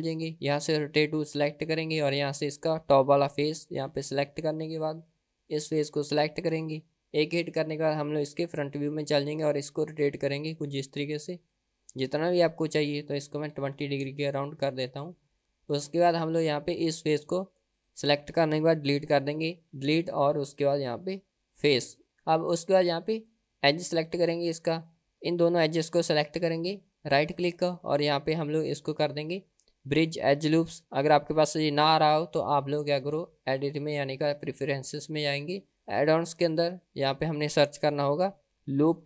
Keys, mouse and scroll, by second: 0.0 Tab, 1.4 click, 4.0 click, 5.5 click, 7.2 KP_1, 8.4-9.6 scroll up 4, 9.6-11.8 drag, 13.1-14.8 drag, 16.3 click, 17.8 click, 19.8 Delete, 24.0 click, 25.2 KP_1, 27.1-32.8 right drag, 33.4-34.7 drag.